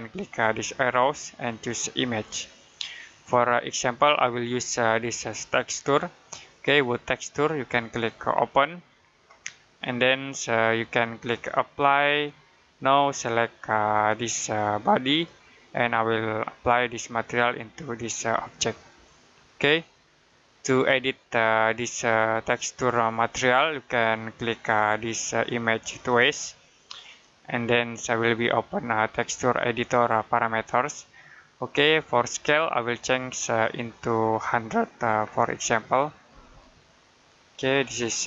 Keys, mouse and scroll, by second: 0.8 click, 4.9 click, 8.3 click, 25.8 click, 32.7 click, 35.1 typing, 36.1 typing, 37.0 click.